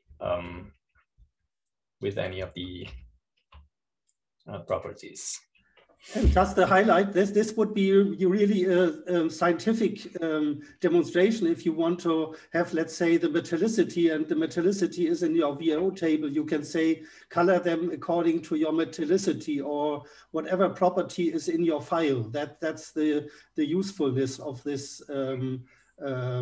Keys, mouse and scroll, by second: 1.9 ctrl+k, 4.1 click, 5.0 ctrl+k, 6.3-8.0 drag, 10.6-13.1 drag, 13.4-16.6 drag, 16.9-18.0 drag, 18.3-19.7 drag, 20.1 click, 20.9-21.7 scroll down 1, 23.4-24.2 scroll up 2, 24.2-25.5 scroll up 1.